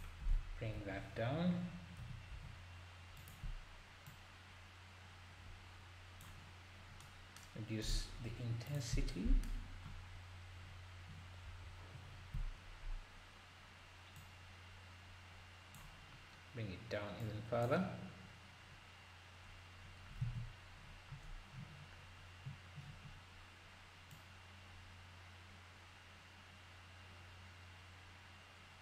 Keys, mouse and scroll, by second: 0.3-0.8 scroll down 4, 0.8 KP_7, 1.1-1.9 scroll down 1, 1.9 scroll down 2, 2.0 s, 4.1 click, 7.8-8.8 drag, 11.4 KP_0, 12.0-13.4 scroll up 5, 14.1 click, 17.2-20.2 drag, 20.2 alt+a, 21.4-22.0 scroll down 1, 22.0-22.4 scroll up 1, 24.1-27.2 drag.